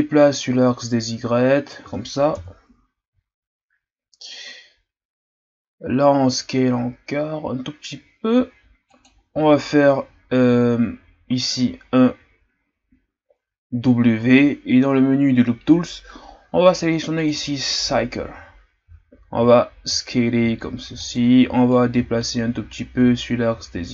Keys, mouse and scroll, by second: 2.3 KP_1, 3.3-4.4 shift+scroll up 2, 5.9 s, 14.1 w, 19.3 s, 21.7-23.9 drag.